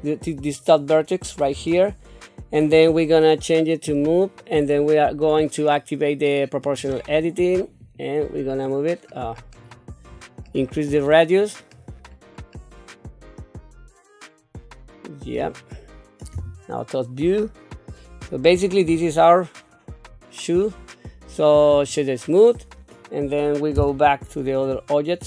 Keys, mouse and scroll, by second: 1.5 q, 3.9 click, 6.6 click, 7.8 click, 8.2-15.3 drag, 16.3 KP_7, 18.9 Tab, 19.5-22.7 right drag, 23.8 KP_Divide, 24.5-25.2 scroll down 3.